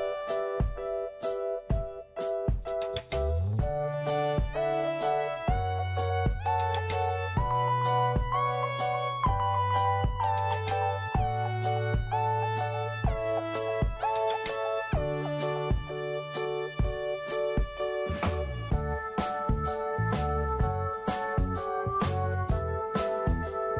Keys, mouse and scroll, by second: 0.7-3.5 drag, 3.5 scroll up 1, 4.5 click, 9.5-10.6 right drag, 10.7 click, 13.1 right click, 15.0 click, 23.1 middle click.